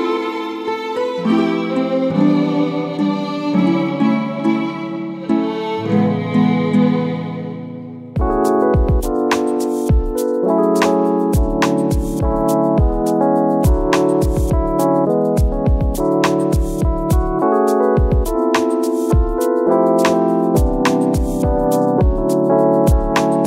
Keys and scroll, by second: 4.0 ctrl++, 4.2 space, 4.8 ctrl+z, 5.9 ctrl+-, 6.3 Delete, 9.6 ctrl+e, 12.3 ctrl++, 12.6 space, 14.2 ctrl+z, 18.2 ctrl+-, 23.2 ctrl+z.